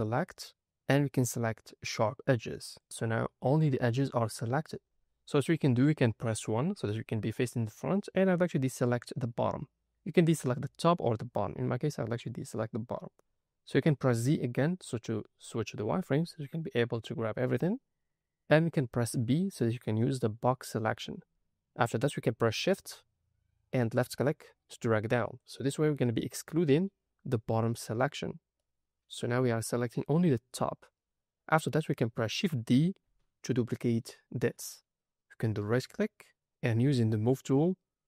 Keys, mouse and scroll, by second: 0.0-2.8 drag, 3.1 scroll up 2, 4.2-4.6 scroll down 3, 6.5 KP_1, 14.0 z, 18.9 b, 23.9 shift+click, 28.5 middle click, 29.6 middle click, 31.5-31.8 scroll down 1, 31.8 middle click, 33.0 shift+d, 35.7 right click, 37.2 click, 37.6-38.0 scroll down 2.